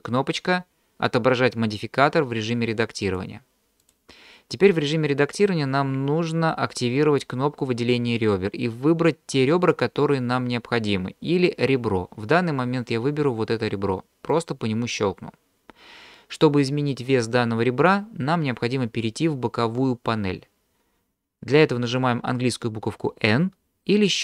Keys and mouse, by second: 3.1-3.9 drag, 14.3 click.